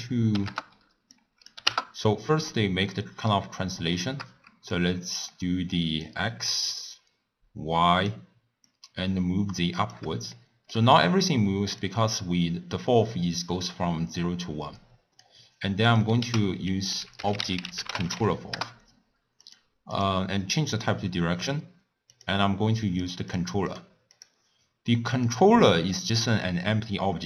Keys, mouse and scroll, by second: 2.5-3.4 middle drag, 3.4-4.0 scroll down 3, 4.0 shift+middle click, 4.7-10.3 drag, 10.3-11.8 shift+middle drag, 11.8-14.7 drag, 15.8 click, 16.2 ctrl+a, 19.9-22.2 drag, 22.9 click, 23.3 click, 23.7 click, 24.1 click, 25.2 drag, 25.6-26.8 middle drag, 26.8-27.2 scroll up 1.